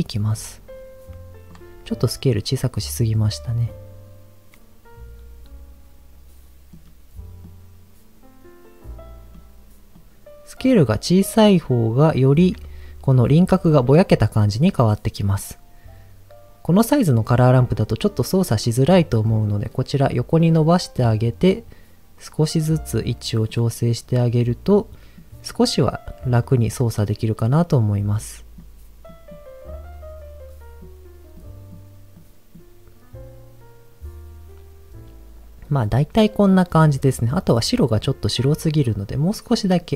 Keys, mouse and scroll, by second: 2.0-3.2 shift+drag, 3.7-6.7 shift+drag, 7.4-9.4 shift+drag, 9.9-12.4 shift+drag, 18.8 click, 19.5 click, 20.6 middle click, 20.9-21.5 scroll up 2, 21.5-23.0 drag, 23.4-25.1 drag, 25.6-27.0 drag, 27.4-28.7 drag, 29.1 click, 29.7-30.8 drag, 31.3 click, 32.1 click, 36.0-36.8 middle drag, 37.9 click.